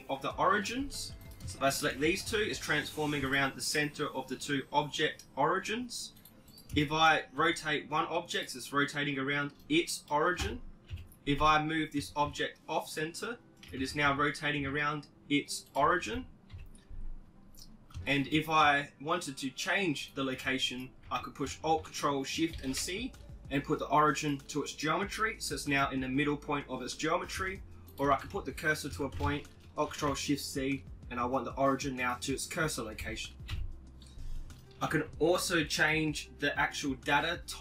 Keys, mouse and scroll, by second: 1.6-4.1 right drag, 2.7 r, 6.6-8.5 right drag, 7.4 click, 7.8 r, 9.7 KP_7, 10.0 Tab, 10.6 g, 12.4 Tab, 12.6 r, 15.1 KP_1, 17.2 Tab, 18.6-20.4 right drag, 18.9 b, 19.6 Tab, 26.1 Tab, 26.8 shift+s, 27.1-28.2 right drag, 27.5 Tab, 32.1 KP_1, 33.2-34.4 middle drag, 34.4-36.2 drag.